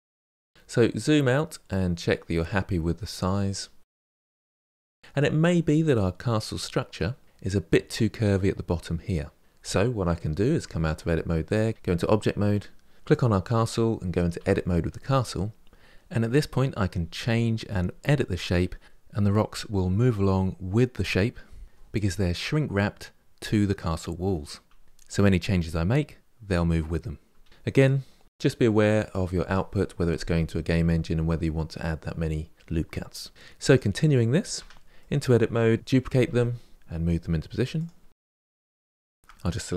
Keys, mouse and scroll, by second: 0.4-1.3 scroll down 4, 1.3-3.9 middle drag, 9.4-10.2 scroll up 2, 10.2 Tab, 11.3 click, 13.2 Tab, 13.9 alt+Left, 14.1 ctrl+b, 14.8 middle click, 17.6 middle click, 18.9 alt+Left, 19.1 g, 19.7 alt+Left, 19.9 g, 20.4 g, 21.5 alt+click, 21.7 g, 22.5 alt+click, 22.6 middle click, 22.9 g, 23.4-23.7 scroll down 7, 23.7 middle click, 24.3-24.9 scroll up 2, 24.5 shift+middle click, 24.9 ctrl+r, 25.1 middle click, 25.9 scroll down 6, 26.1 middle click, 26.1 Tab, 26.3 middle click, 27.5-30.1 middle drag, 32.1-32.7 scroll up 8, 32.7-33.4 middle drag, 33.4 click, 33.9 middle click, 34.3 Tab, 34.7-35.7 middle drag, 35.8-38.2 typing, 36.7 shift+middle click, 38.5 shift+middle click, 38.9 click, 39.1 shift+click.